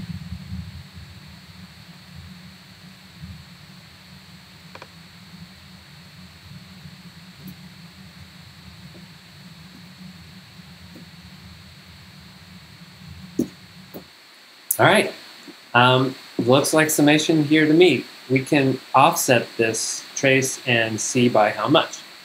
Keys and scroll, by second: 7.5 space, 8.8-11.5 typing, 13.4 Return, 14.0 g.